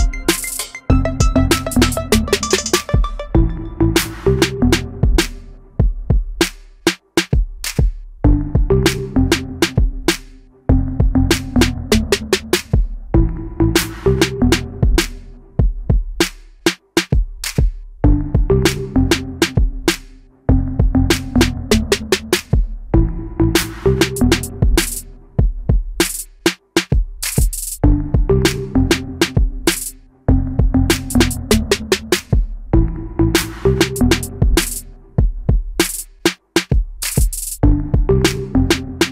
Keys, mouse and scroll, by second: 20.0 ctrl+f, 26.8 Delete, 35.6 ctrl+f.